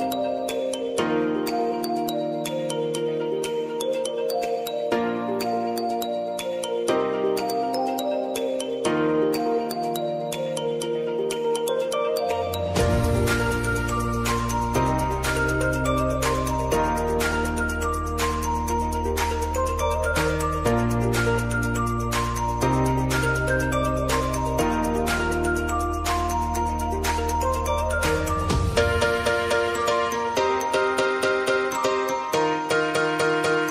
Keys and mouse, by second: 3.9 space, 5.6 click, 5.9 space, 10.5 space, 12.1 click, 13.7 ctrl+shift+c, 16.1 space, 16.4 l, 17.5 Return, 18.8 click, 20.5 ctrl+d, 20.9-22.6 drag, 22.6 Return, 23.1-24.2 typing, 24.2 Return, 25.6 click, 30.6 ctrl+d, 33.4 click.